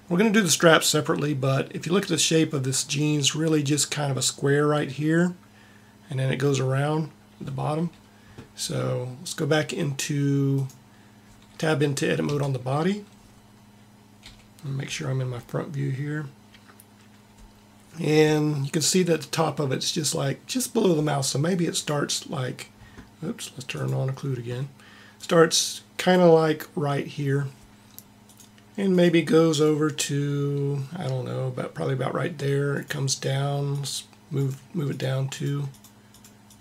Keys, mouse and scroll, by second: 10.4-12.1 drag, 12.1 Tab, 14.1 KP_1, 21.7-23.0 drag, 28.0 KP_3, 28.0 KP_1, 28.1-31.1 drag, 32.6-36.6 drag.